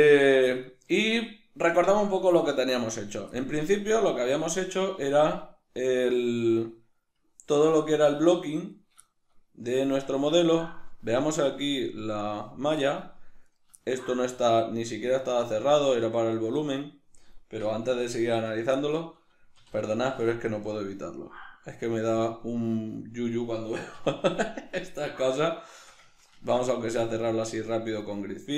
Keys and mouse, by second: 5.2 Right, 8.7-9.0 right drag, 9.0-12.0 shift+middle drag, 12.0 click, 12.9-13.5 middle drag, 13.5 right click, 13.8-19.8 shift+middle drag, 17.6 \, 18.5 Tab, 19.6 3, 19.8-20.8 right drag, 20.8 x, 24.5 alt+right click, 25.0-28.5 shift+middle drag, 27.3 ctrl+f.